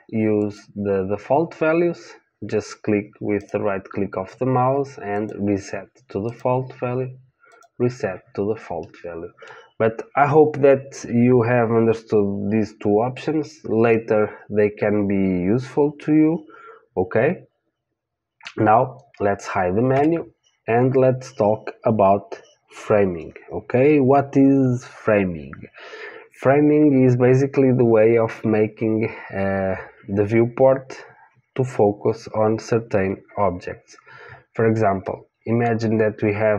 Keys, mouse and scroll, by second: 3.4-5.4 right drag, 6.2-8.2 right drag, 8.8-12.9 middle drag, 19.9 n, 35.0-36.5 middle drag.